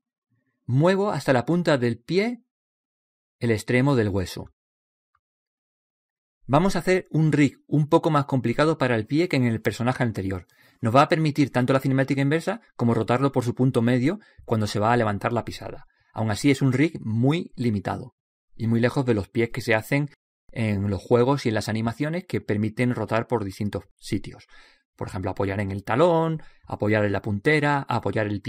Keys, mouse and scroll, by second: 0.6 click, 3.1 click, 6.0-9.5 drag, 9.9 right click, 12.9-17.9 middle drag, 17.9 scroll up 1.